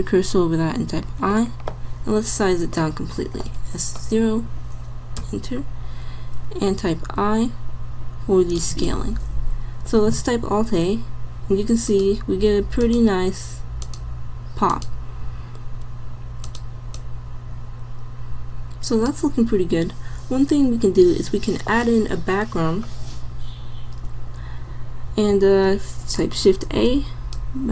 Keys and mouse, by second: 0.9 i, 3.5 s, 6.9 i, 10.5 alt+a, 11.9 click, 25.4 shift+a.